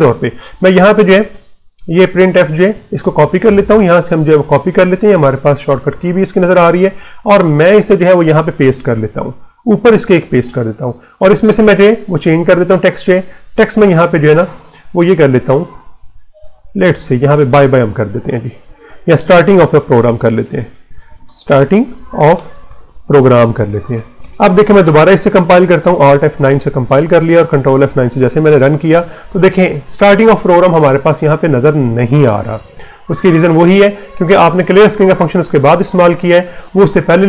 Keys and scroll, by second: 8.2 Left, 9.2 Return, 15.5 BackSpace, 18.9-24.1 typing, 25.7 alt+F9, 26.6 Return, 27.8 ctrl+F9.